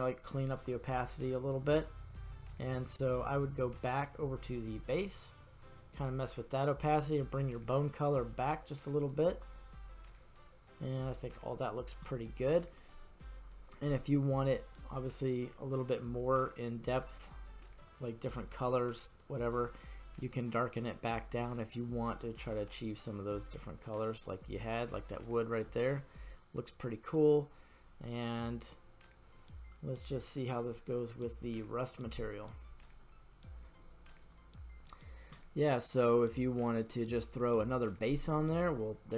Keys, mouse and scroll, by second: 1.6-3.2 drag, 4.4 click, 5.8-9.2 drag, 9.5-11.4 drag, 12.0 scroll up 1, 12.0-12.8 middle drag, 13.0 scroll up 1, 15.4 click, 16.2-18.3 scroll down 3, 18.3 click, 25.9-27.2 middle drag, 28.4-30.8 drag, 36.4-38.5 middle drag.